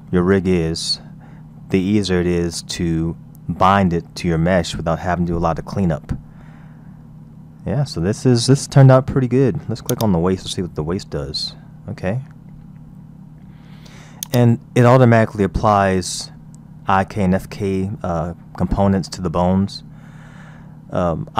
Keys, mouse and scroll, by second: 0.0-3.1 middle drag, 7.3 KP_1, 8.4-9.2 shift+middle drag, 9.2-9.9 scroll up 2, 9.9 click, 10.4-11.1 scroll down 2, 11.1 r.